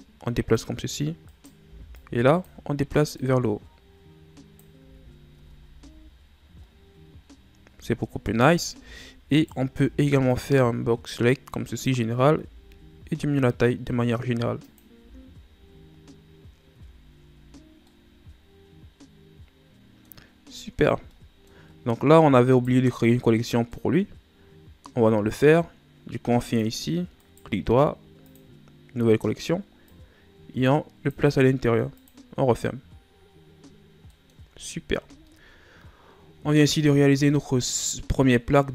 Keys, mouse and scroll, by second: 1.2 right click, 1.6 b, 3.1-4.8 drag, 4.8 z, 5.3 Tab, 5.8 a, 6.1-6.7 scroll down 7, 7.1-7.4 scroll up 5, 7.7 Tab, 8.4 scroll up 1, 8.7 z, 9.3 right click, 9.8 b, 12.4 s, 14.9 z, 16.7 Tab, 17.4 scroll down 1, 17.9-20.3 middle drag, 20.3-21.1 scroll down 7, 21.1-21.8 middle drag, 21.8 scroll up 4, 22.4 right click, 23.7-26.5 middle drag, 26.5 click, 27.2-29.8 right drag, 29.8 click, 31.9 click.